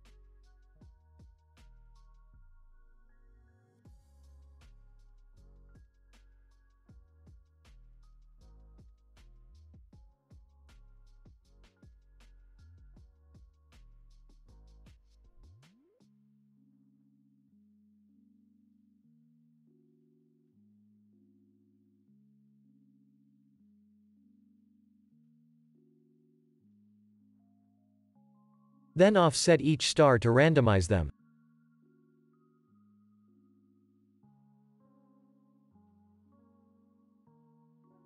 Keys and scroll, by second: 0.3 ctrl+c, 1.7 ctrl+v, 2.4 ctrl+v, 2.9 ctrl+v, 3.4 ctrl+v, 3.9 ctrl+v, 4.9 [, 10.0 space, 17.6 space, 20.3 ctrl+c, 23.8 ctrl+c, 24.6 ctrl+c, 25.3 ctrl+c, 26.0 ctrl+c, 26.7 ctrl+c, 27.4 ctrl+c, 28.0 ctrl+s, 32.3 space.